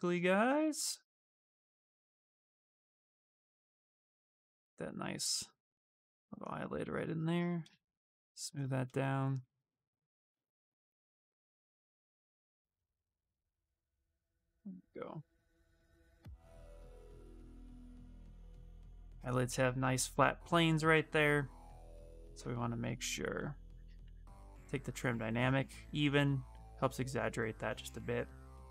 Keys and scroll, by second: 22.0 ctrl+d, 23.6-24.7 typing.